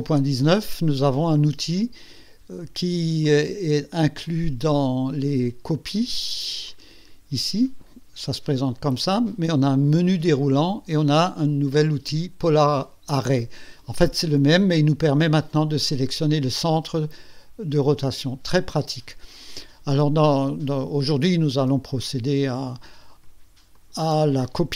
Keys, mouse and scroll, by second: 3.2 click, 6.6 click, 9.7 click, 12.4 click, 18.5 click, 23.8 ctrl+click.